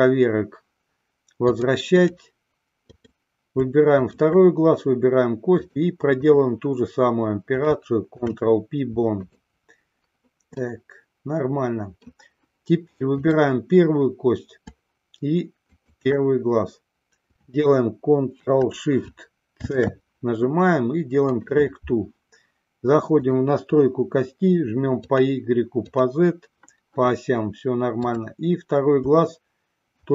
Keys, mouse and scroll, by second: 1.7-2.6 drag, 3.2 click, 4.2 shift+click, 5.8-6.8 drag, 8.3 ctrl+p, 10.8-12.4 middle drag, 15.9-16.9 shift+drag, 23.3 click, 28.2-29.5 drag.